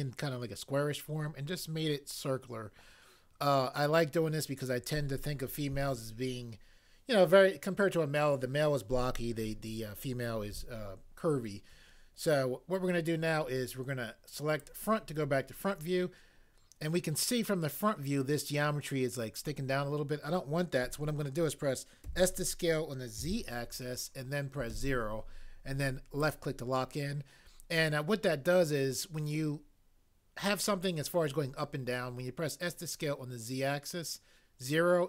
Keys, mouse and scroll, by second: 22.0 s, 23.2 z, 24.7 0.